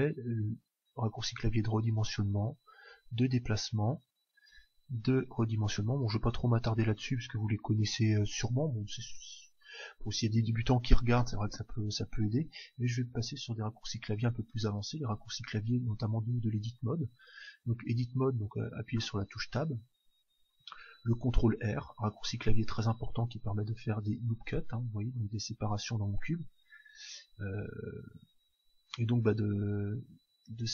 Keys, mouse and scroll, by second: 0.3 s, 2.9 g, 3.8-5.6 drag, 4.5 s, 6.6-8.6 drag, 16.7 Tab, 17.9 Tab, 18.6 Tab, 21.5 ctrl+r, 25.0-26.7 drag, 25.8 s.